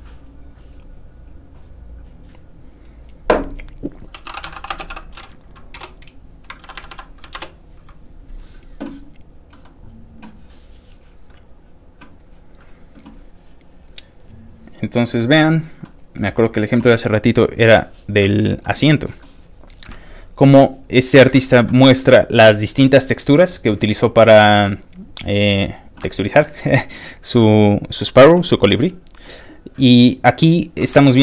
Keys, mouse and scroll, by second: 1.3 click, 4.2 e, 5.5-6.3 typing, 6.7 Down, 7.5 ctrl+Return, 9.5 ctrl+middle click, 11.0-11.9 scroll down 2, 12.0-12.7 scroll down 5, 13.1 scroll up 2, 13.2 middle click, 14.0 click, 14.8 ctrl+click, 15.4 ctrl+middle click, 16.2 middle click, 16.3 scroll down 2, 17.9 scroll up 3, 18.3 scroll down 2, 18.7 ctrl+middle click, 20.0-20.4 scroll down 3, 20.5-21.3 scroll up 3, 21.3-25.6 scroll down 3, 25.6 middle click, 25.7-27.1 scroll down 2, 27.1 scroll up 2, 27.6 scroll down 2, 29.4-30.0 scroll up 2, 30.0-30.5 scroll down 3, 30.5 scroll up 2, 30.9-31.2 scroll down 3.